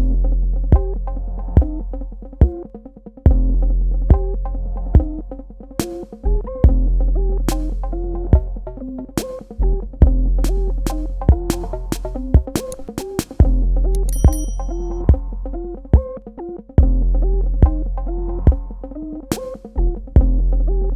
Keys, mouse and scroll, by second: 2.7-4.7 scroll down 1, 6.3 click, 15.2 click.